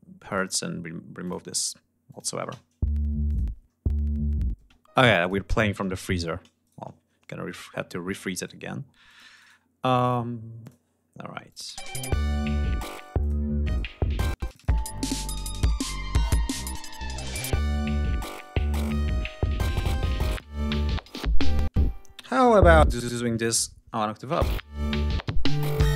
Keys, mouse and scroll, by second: 0.2 click, 1.2 click, 2.0 click, 2.4 space, 3.3 click, 4.6 space, 4.9-5.4 drag, 6.6 shift+right click, 7.5-7.9 scroll up 2, 8.4 right click, 9.1-9.6 drag, 9.3 right click, 10.5 click, 11.4 click, 11.6 space, 13.1 click, 13.6 click, 14.2 space, 14.4 click, 14.8 ctrl+scroll up 2, 16.1 ctrl+scroll down 2, 16.4 ctrl+scroll up 2, 17.2 d, 19.3 ctrl+scroll up 2, 19.7 ctrl+scroll down 2, 20.9 ctrl+scroll up 2, 21.3 ctrl+space, 22.2 click, 23.0 alt+shift+Up, 23.7 alt+shift+click, 23.9 space.